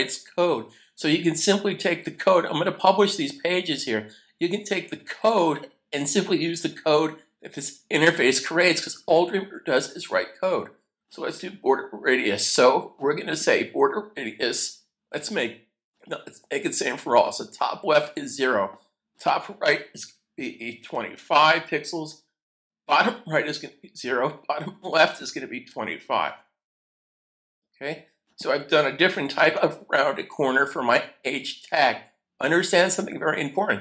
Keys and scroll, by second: 20.8-22.2 typing, 25.8-26.2 typing, 27.5-28.2 typing, 29.4 super+s.